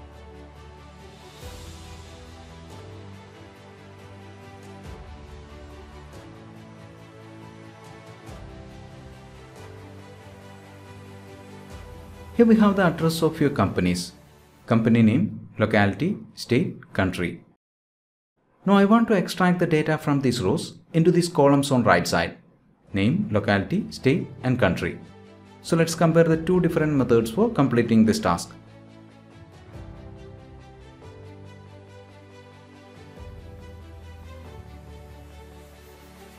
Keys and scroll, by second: 4.7 ctrl+Return.